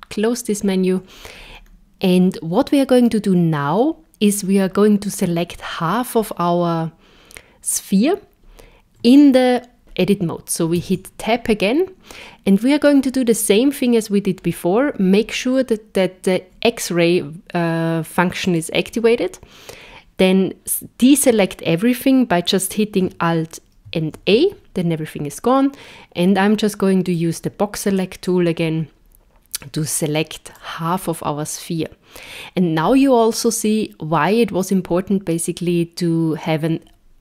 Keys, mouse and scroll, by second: 1.3-1.7 scroll up 4, 10.8 Tab, 18.4 click, 23.9 alt+a, 27.1 click, 28.3 click.